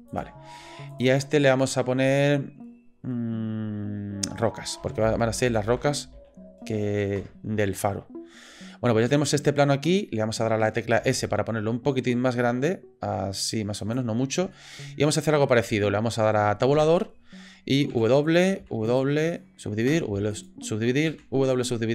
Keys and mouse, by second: 0.9 click, 1.1-7.5 drag, 8.7-9.0 middle drag, 9.2-9.6 middle drag, 11.0 s, 14.5-15.5 shift+middle drag, 16.7 Tab, 17.9 w, 18.6 w, 21.1 w.